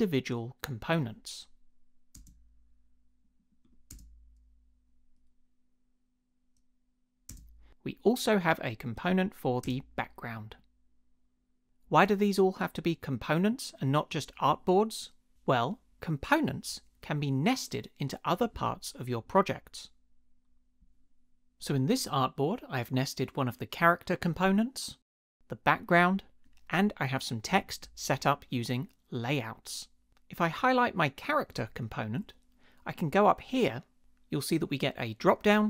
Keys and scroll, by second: 2.2 space, 3.9 space, 7.3 space, 9.6 space, 34.0 Return.